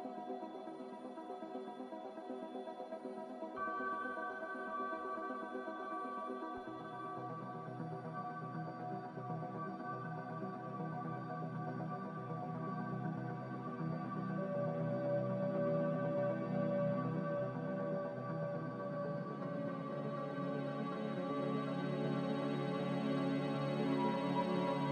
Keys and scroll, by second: 1.3 5, 4.2 2.